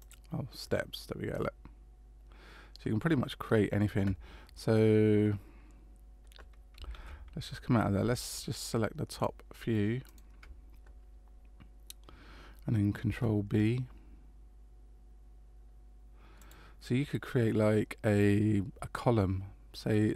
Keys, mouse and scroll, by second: 1.3 middle click, 3.4-4.3 scroll down 2, 6.9 ctrl+z, 8.2 shift+right click, 9.1 shift+right click, 13.1 ctrl+b.